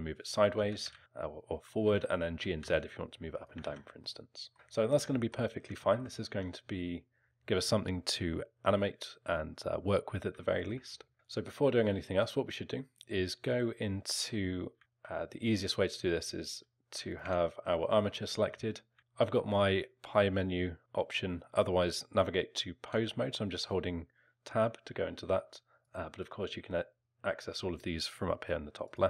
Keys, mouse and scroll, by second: 0.9 ctrl+z, 1.8 g, 3.6 ctrl+z, 4.0 alt+middle click, 4.5 alt+middle click, 5.1 middle click, 5.8 alt+middle click, 6.3 Tab, 10.5 alt+middle click, 11.1 Tab, 11.1 alt+middle click, 12.2 click, 14.7 z, 17.1 click, 17.2 Tab, 18.4 z, 18.9 z, 19.0 Tab, 25.8 click, 26.2 click, 27.0 click.